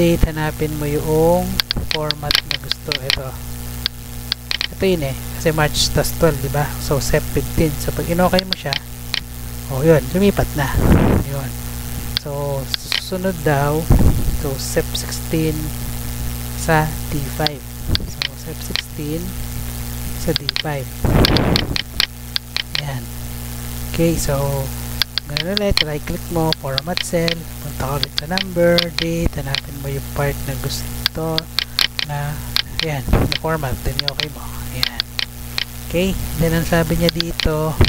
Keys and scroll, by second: 13.4 Tab, 18.9 ctrl+c, 22.0 ctrl+v.